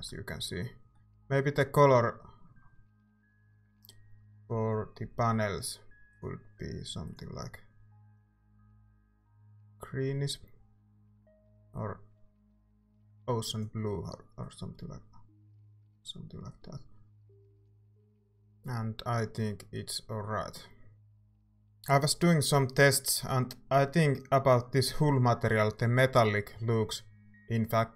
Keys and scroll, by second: 17.0 ctrl+s.